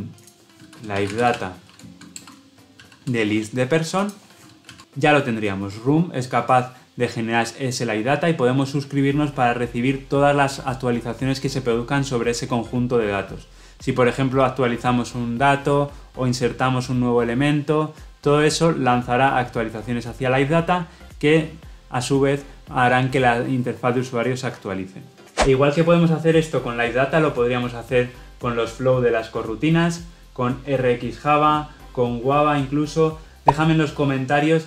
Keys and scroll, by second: 2.0 Delete, 2.1 Return.